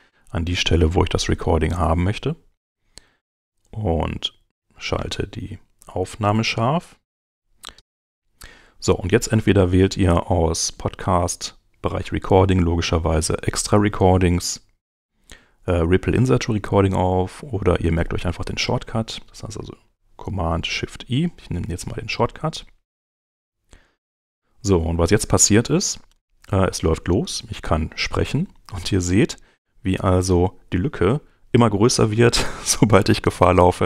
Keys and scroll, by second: 23.2 shift+super+i.